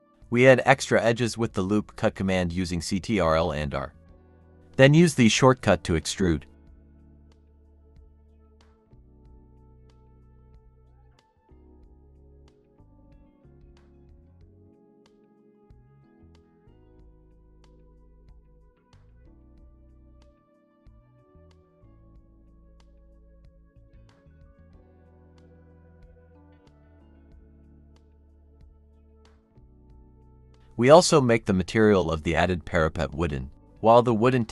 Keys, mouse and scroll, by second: 0.5 Escape, 1.2 ctrl+r, 4.9-5.3 scroll down 1, 5.3 middle click, 6.0-7.3 scroll up 1, 7.3 typing, 7.8-8.9 scroll down 1, 8.9-10.5 typing, 10.0 scroll up 1, 10.9 ctrl+r, 15.3 scroll up 1, 16.3-17.0 typing, 18.5 scroll down 1, 18.6 middle click, 19.5-20.5 scroll up 1, 20.5-22.1 typing, 20.8-21.2 scroll down 1, 21.8 Escape, 23.6 middle click, 24.1-24.5 scroll up 1, 25.2 ctrl+r, 27.3-28.3 scroll down 1, 28.3 typing, 28.6-29.3 scroll down 1, 29.3 typing, 30.3 scroll up 1, 31.6-34.0 typing.